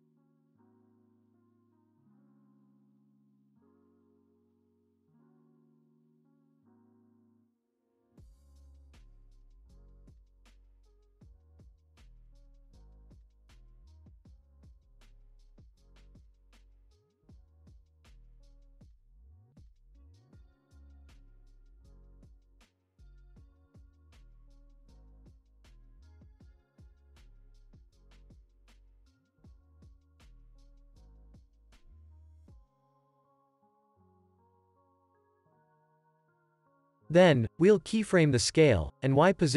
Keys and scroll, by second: 13.8 alt+x, 15.7 ctrl+s, 17.1 space, 18.0 ctrl+s, 20.0 space, 21.5 Home, 22.1 v, 22.5 ctrl+s, 24.2 F9, 24.7 space, 25.6 ctrl+s, 26.8 space, 28.1 alt+x, 31.0 space, 32.0 ctrl+s, 35.1 p, 37.0 u, 37.6 ctrl+s, 38.2 u.